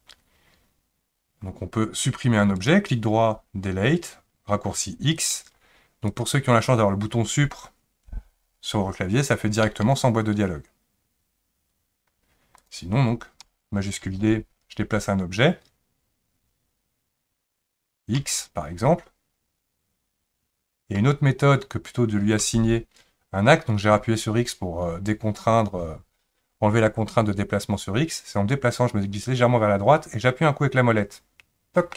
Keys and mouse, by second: 2.7-5.3 right drag, 6.1 click, 9.7 Delete, 12.6 click, 14.0 shift+d.